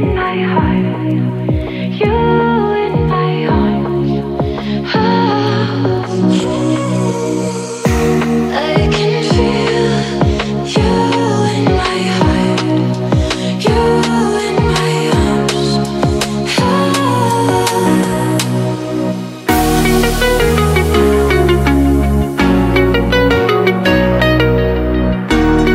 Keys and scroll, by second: 5.3 8, 6.7-9.7 typing, 12.7 BackSpace, 18.7 t.